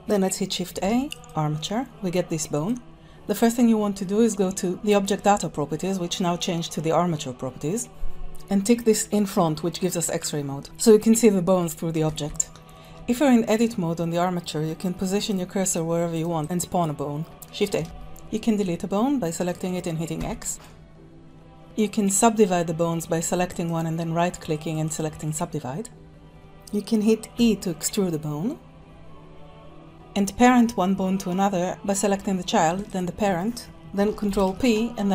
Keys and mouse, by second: 0.9 shift+a, 2.5 click, 9.1 click, 12.0 alt+z, 12.8 Tab, 13.4 click, 15.2 shift+click, 16.1 shift+click, 17.8 shift+a, 19.6 click, 20.6 x, 21.9 click, 23.6 right click, 27.3 e, 32.9 shift+click, 34.3 ctrl+p.